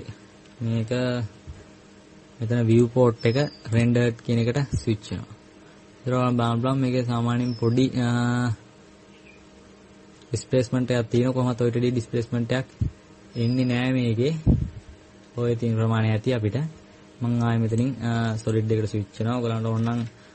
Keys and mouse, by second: 3.4-5.4 drag, 12.0 KP_Add, 18.4-20.3 drag.